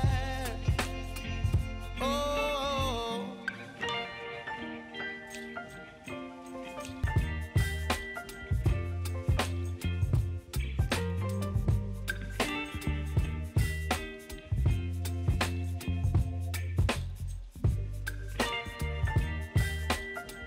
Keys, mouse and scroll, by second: 11.9-18.6 shift+drag.